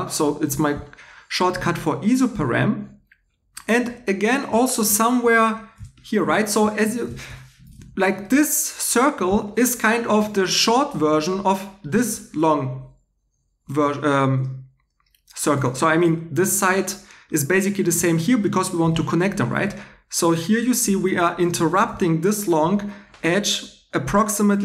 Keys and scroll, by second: 5.2 2, 7.7 2, 10.9 2, 15.5 2.